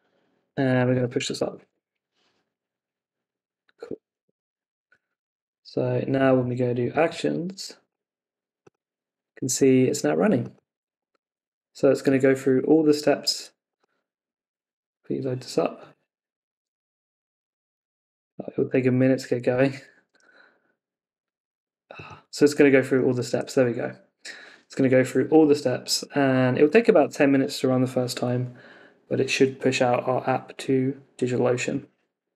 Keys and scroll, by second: 1.5 Tab, 1.6 Return, 4.2 super+Tab, 12.7 super+Tab, 20.0 super+r, 23.1 super+r.